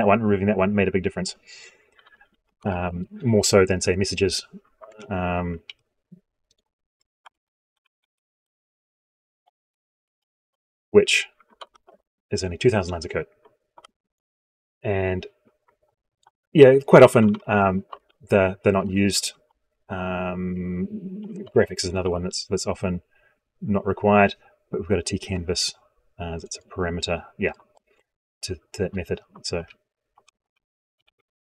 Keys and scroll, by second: 5.5 ctrl+z, 9.9 ctrl+Return, 11.4 ctrl+End, 13.5 ctrl+Home, 21.8 ctrl+x, 29.2 ctrl+z.